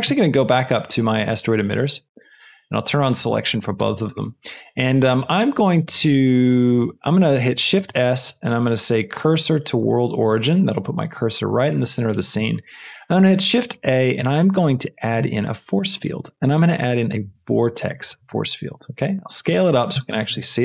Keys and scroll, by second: 7.6 shift+s, 12.6 shift+a.